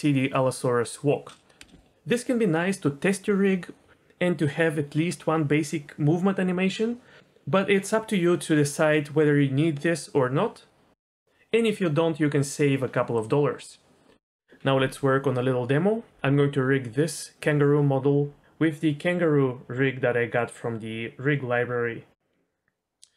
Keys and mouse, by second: 1.6 space, 18.6 click, 19.8-22.2 drag.